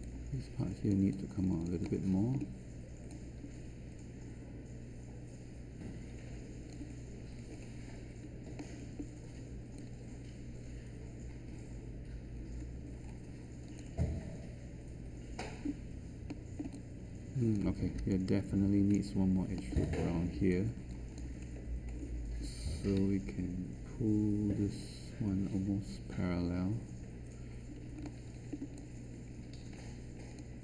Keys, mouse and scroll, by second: 22.9 q.